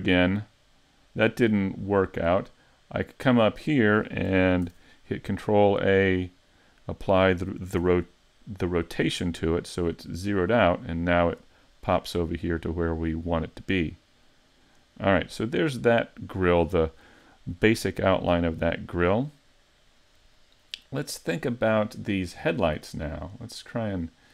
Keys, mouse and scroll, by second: 0.0 middle click, 4.7 ctrl+a, 7.8 a, 9.3 middle click, 10.7 scroll up 1, 11.1 shift+middle click, 11.7 middle click, 12.6 middle click, 15.4 shift+middle click, 15.9 scroll up 1, 16.3 middle click, 17.2 shift+middle click, 17.8-18.2 scroll down 2, 18.2 middle click, 20.5 shift+middle click, 22.3-22.8 scroll down 1, 22.8 middle click, 23.6-24.0 scroll up 2, 24.0 middle click.